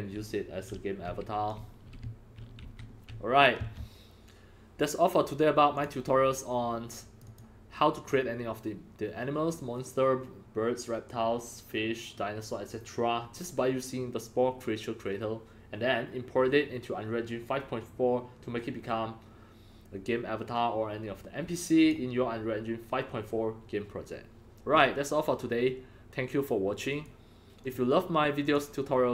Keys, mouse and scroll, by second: 0.0-2.6 typing, 3.6 Escape, 5.7 click, 6.9 click, 7.2 click, 7.7 drag, 21.8 click, 26.8 click, 27.5 click, 28.4 click.